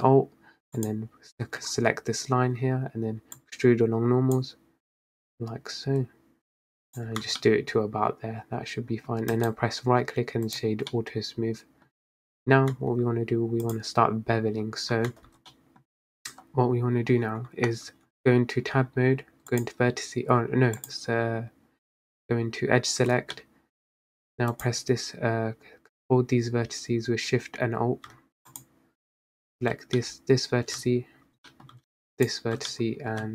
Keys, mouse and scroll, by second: 0.9 alt+shift+click, 3.5-5.5 drag, 7.3 Tab, 7.5-9.2 middle drag, 9.2 scroll down 2, 9.4-11.0 right drag, 11.0-12.1 middle drag, 12.1-12.9 scroll up 3, 12.9 Tab, 13.7-15.0 drag, 15.0 scroll down 4, 15.2 Tab, 15.5-16.2 scroll up 5, 15.6 middle click, 16.2 Tab, 17.3 Tab, 17.7-18.0 scroll down 4, 18.0 Tab, 19.6-23.2 drag, 23.2 scroll up 3, 23.5-24.6 middle drag, 24.6 click, 28.6 alt+shift+click, 30.1-32.2 middle drag, 32.2 alt+shift+click, 32.8 middle click.